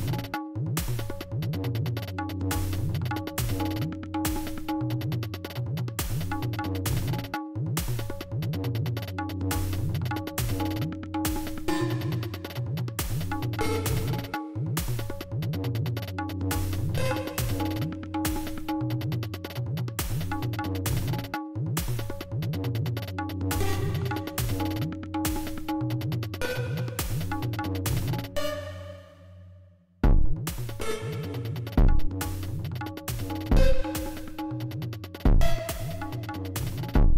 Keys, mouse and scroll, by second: 2.1 g, 3.4 click, 4.4 space, 5.3 space, 9.2 d, 10.6-11.8 drag, 13.0 click, 16.0-17.1 drag, 22.2-23.7 drag, 25.6 click, 27.5 click, 30.0 click, 32.3-33.7 drag, 34.8 click.